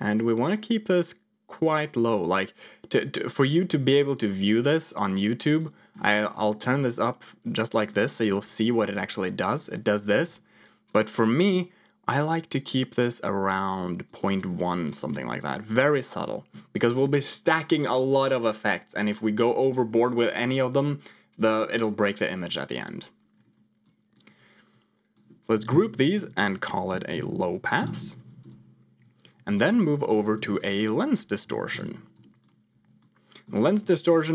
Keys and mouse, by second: 0.0-5.7 drag, 6.2 middle click, 7.7 click, 8.3 m, 8.9 m, 9.6 m, 10.2 m, 11.0-15.3 drag, 16.2 click, 23.7 click, 24.6 click, 25.7 ctrl+j, 26.1 F2, 28.1 s, 29.1 click, 29.6 middle click, 30.3 shift+a, 32.9 click, 33.8 middle click.